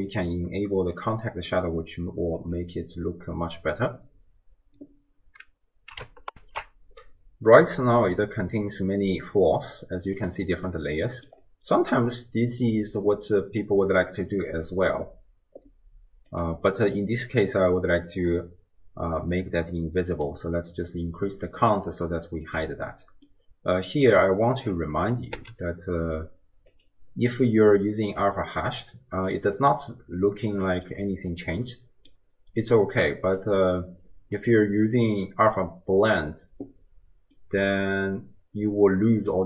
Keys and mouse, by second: 2.5-3.8 drag, 2.5-3.8 right drag, 6.4 ctrl+alt+shift+q, 10.2 click, 10.7-11.4 drag, 10.7-11.4 right drag, 12.1-14.9 middle drag, 18.2-20.4 drag, 21.8-22.6 middle drag, 23.3-24.7 middle drag, 26.7-28.4 drag, 29.4-31.0 middle drag, 31.6-32.2 middle drag, 33.5-35.1 drag, 37.7-39.4 middle drag.